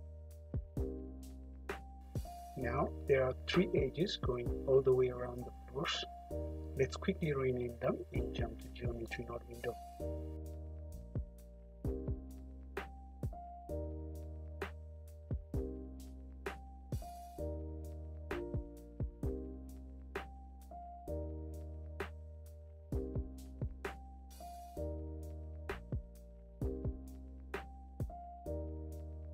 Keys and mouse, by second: 0.9 h, 1.7 `, 2.3 middle click, 2.6-3.1 drag, 3.3 `, 4.8 Tab, 5.5 a, 6.3 p, 8.2 Tab, 10.5-12.9 middle drag, 14.5 F2, 16.3 BackSpace, 16.4 BackSpace, 17.9 F2, 18.8 d, 19.4 click, 19.9 F2, 20.7 n, 22.5 alt+h, 23.7 drag, 23.9 middle click, 24.1-24.5 drag, 24.4 `, 24.9-25.6 drag, 24.9 `, 25.6 middle click, 25.8 click, 26.0 click, 26.2 `, 26.5 `, 27.3 h, 28.3 `.